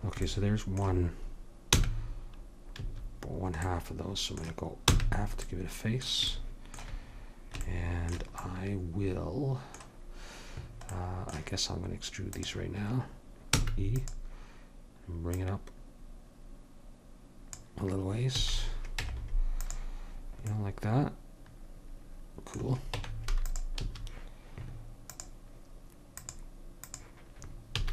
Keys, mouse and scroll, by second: 1.7 f, 2.8 a, 4.9 f, 12.3-14.5 drag, 13.5 e, 15.4 click, 16.9 click, 18.4 a, 19.0 Tab, 22.9 Tab, 23.8 a, 27.7 a.